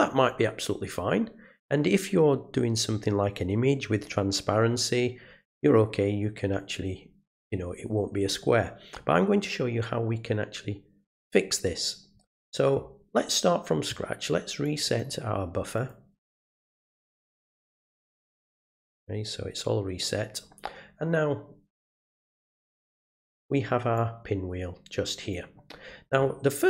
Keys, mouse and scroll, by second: 14.6 click, 14.8 click, 15.7 right click, 18.3 click, 20.0 click, 22.0 click, 23.9-25.3 drag.